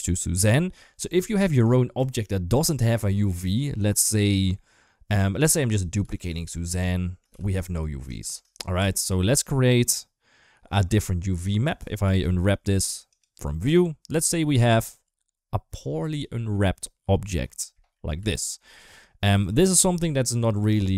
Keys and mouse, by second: 1.0 shift+middle drag, 1.8 Tab, 2.7 shift+a, 4.9 shift+a, 5.9 shift+d, 6.8 shift+middle click, 7.1 g, 8.0 shift+middle click, 8.6 Tab, 11.9 u, 17.8 a, 18.0 s, 19.0 g.